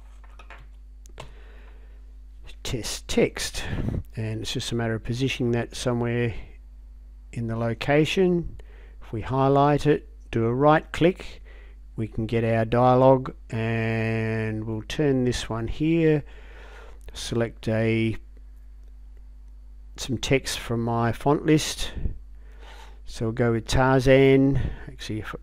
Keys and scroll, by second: 0.0-1.2 typing.